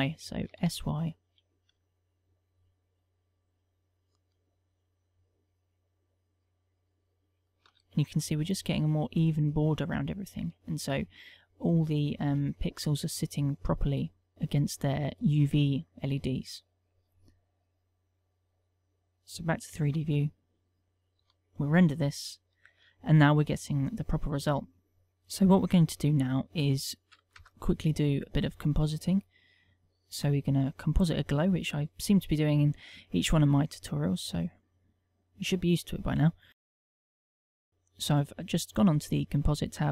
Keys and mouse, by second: 18.3 click, 19.8 Tab, 21.6 F12, 27.1 KP_0, 29.2 click.